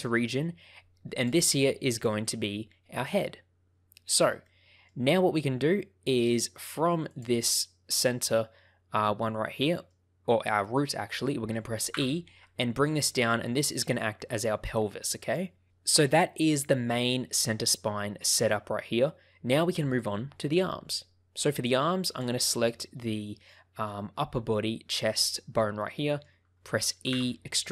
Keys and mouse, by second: 4.4 shift+middle click, 7.1 click, 9.6 shift+middle click, 11.9 e, 13.6 ctrl+click, 22.0 click, 23.0 shift+middle click, 25.8 shift+middle click, 27.1 e.